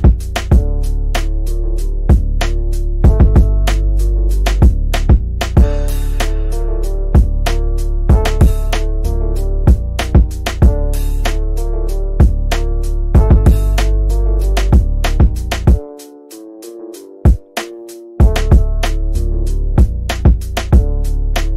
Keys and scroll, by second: 0.9 shift+F2, 1.3 Escape, 2.1 shift+Page_Down, 2.8 Escape, 17.7 shift+/.